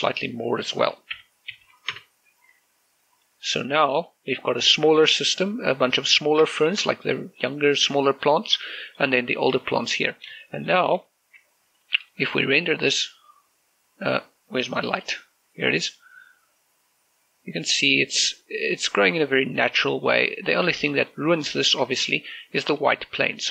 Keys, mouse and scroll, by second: 0.1-0.7 scroll up 1, 0.7 click, 1.9-2.4 typing, 2.7 Return, 3.4 middle click, 4.3-5.0 scroll up 1, 5.0 click, 5.5 middle click, 6.2 scroll up 1, 6.9-7.2 scroll down 1, 7.3 shift+middle click, 9.3 scroll down 1, 9.5 middle click, 10.3 shift+middle click, 10.5 shift+middle click, 11.1 shift+middle click, 12.5 right click, 13.1 shift+z, 15.7 shift+click, 19.6-21.9 middle drag, 21.9 shift+middle click, 21.9-23.5 shift+middle drag.